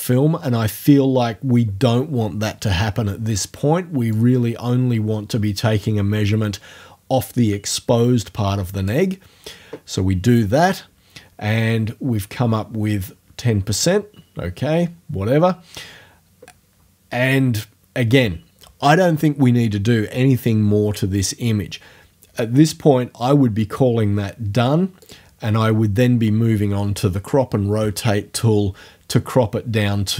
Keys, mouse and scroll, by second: 4.1-9.1 drag, 25.1 click.